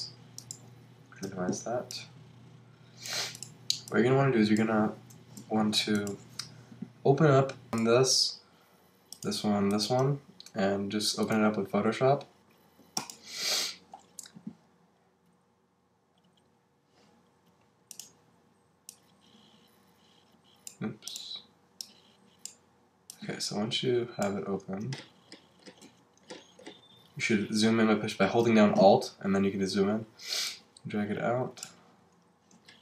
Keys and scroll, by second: 5.4 alt+super+c.